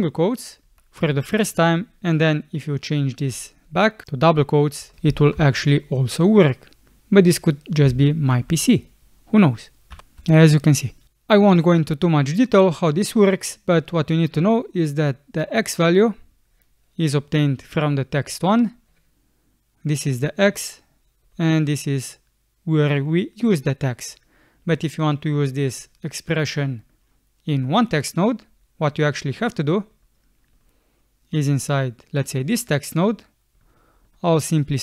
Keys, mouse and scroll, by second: 0.7 BackSpace, 4.8 BackSpace, 5.2 shift+', 9.9 ', 10.3 space.